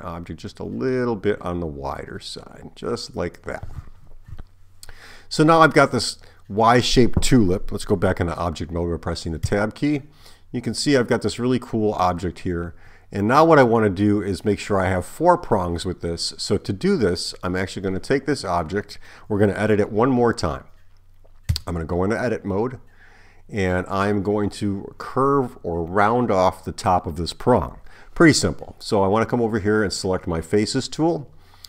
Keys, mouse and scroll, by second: 9.5 Tab, 17.5 click, 21.5 Tab, 29.8 click.